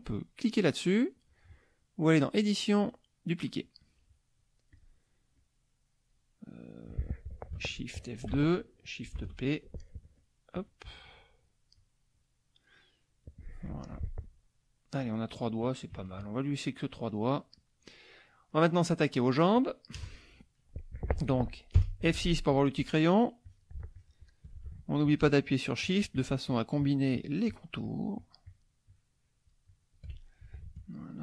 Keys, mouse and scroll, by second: 2.1 click, 4.7 click, 5.4 click, 8.2 shift+F2, 10.1 click, 10.6 click, 11.4 click, 11.8 click, 12.1 click, 13.7 F1, 14.0 click, 15.1 middle click, 15.9 KP_Subtract, 16.6 middle click, 17.1 click, 17.5 click, 18.0 click, 18.5 click, 19.1 click, 19.9 KP_Add, 20.5 click, 21.8 F6, 23.4 click, 23.9 shift+click, 25.0 shift+click, 25.5 shift+click, 28.2 shift+click, 28.9-30.1 shift+drag, 31.0 shift+click.